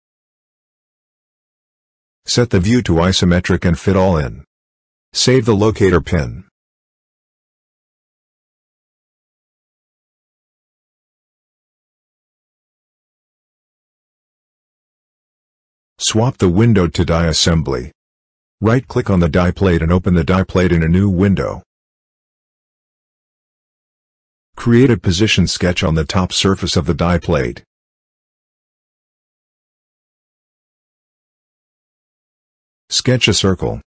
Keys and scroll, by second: 5.7 ctrl+s.